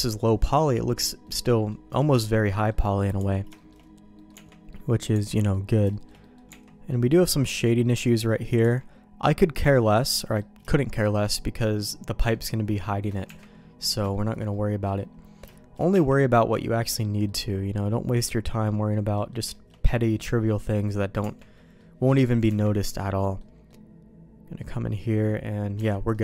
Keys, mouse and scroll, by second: 1.2 middle click, 1.9 shift+middle click, 2.5 middle click, 2.9 click, 3.1 Tab, 3.5 shift+middle click, 4.1 middle click, 4.4 Tab, 4.6 middle click, 5.1 Tab, 5.4 middle click, 5.8 shift+middle click, 6.1 middle click, 6.4 Tab, 6.8 middle click, 7.4 middle click, 8.6 Tab, 9.8 middle click, 10.6 shift+middle click, 12.4 shift+middle click, 13.2 Tab, 13.8 middle click, 14.0 middle click, 14.4 middle click, 15.4 middle click, 15.8 Tab, 16.2 middle click, 17.2 middle click, 19.1 middle click, 19.5 shift+middle click, 19.8 middle click, 20.5 middle click, 21.1 Tab, 21.5 middle click, 22.4 Tab, 23.1 middle click, 23.6-25.2 middle drag, 25.7 Tab, 26.1 middle click.